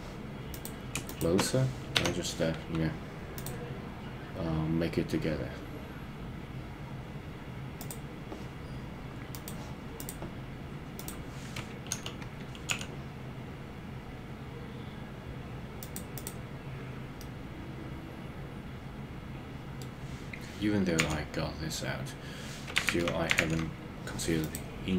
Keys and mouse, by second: 2.1 f, 9.3 click, 12.0 g, 12.7 y, 15.8 click, 16.1 click, 17.1-19.8 middle drag, 21.0 KP_3, 23.0 super+z, 23.4 super+z.